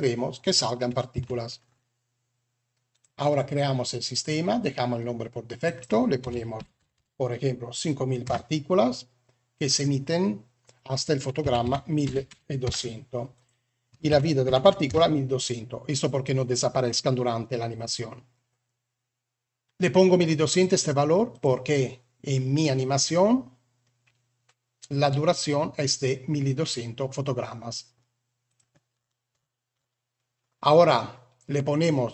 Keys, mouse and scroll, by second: 1.1 Tab, 4.0 click, 5.5-8.2 drag, 6.7 0, 9.6-12.6 drag, 12.2 0, 13.2-14.8 drag, 14.5 0, 21.2 click, 28.4 click.